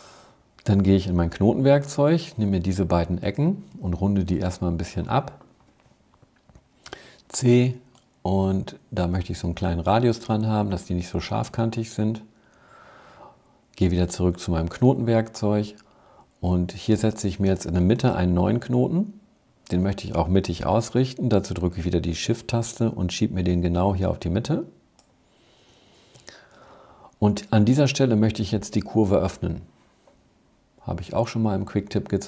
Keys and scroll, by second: 0.9 a, 7.1 c, 14.4 a.